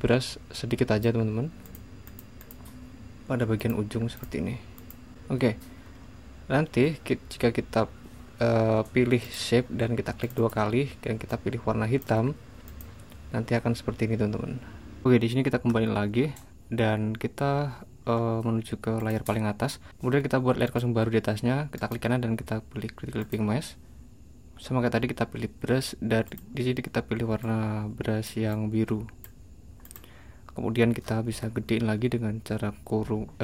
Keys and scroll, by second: 15.7 super+z, 31.2 ].